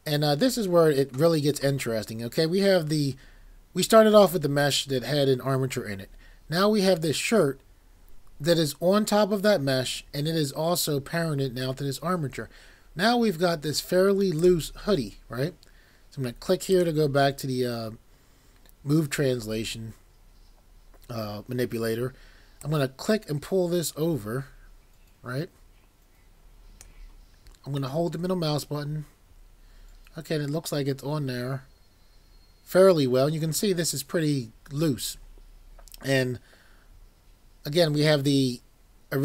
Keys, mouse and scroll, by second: 13.5 scroll, 14.4 click.